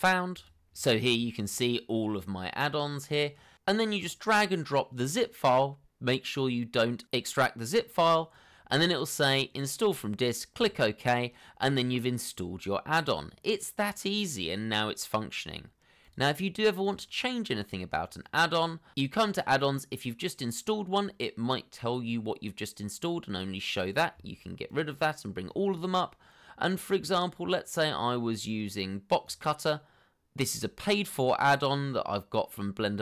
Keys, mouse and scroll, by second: 26.3-26.6 scroll down 1.